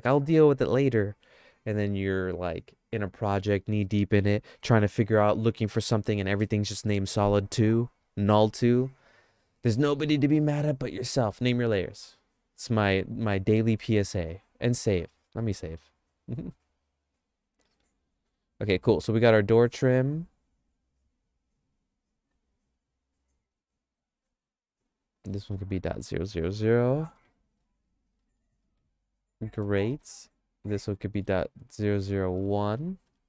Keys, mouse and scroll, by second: 10.5 middle click, 15.7 ctrl+s, 17.5 click, 17.9 click, 18.8 click, 24.7 right click, 25.0-29.7 right drag, 27.0 KP_0, 27.2 KP_0, 30.0 right click, 30.2 click, 30.9-33.2 ctrl+drag.